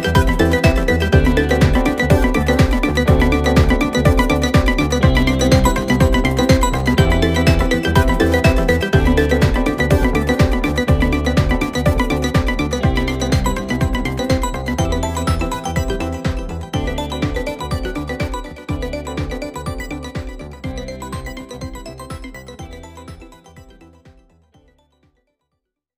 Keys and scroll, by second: 4.1 ctrl+z, 6.6 ctrl+z, 7.5 ctrl+z.